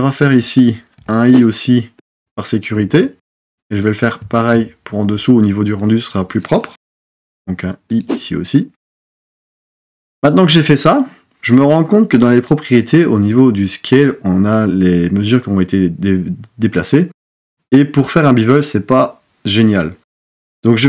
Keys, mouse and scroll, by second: 1.0 i, 6.9 i.